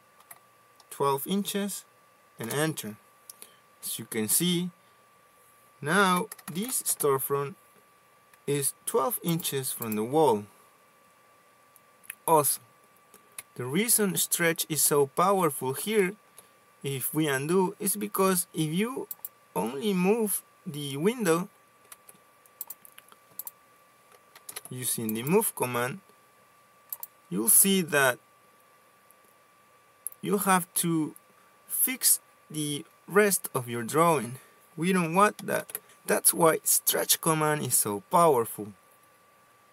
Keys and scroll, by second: 0.0-0.7 typing, 2.8 Return, 6.2-7.5 typing, 13.9 Escape, 20.2 ctrl+z, 21.2 ctrl+z, 27.3 Escape, 29.8 m, 30.0 space.